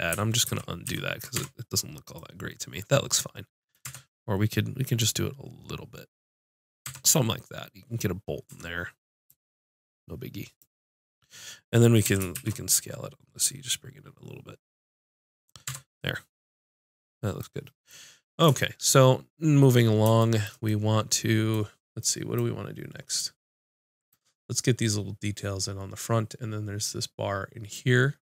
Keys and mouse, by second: 0.5 ctrl+z, 0.8 ctrl+z, 1.3 Tab, 3.8 Tab, 5.0-6.6 drag, 6.8 Tab, 8.5 Tab, 9.2-11.0 drag, 12.0 s, 15.4 click, 15.7 Tab, 25.7-28.3 middle drag.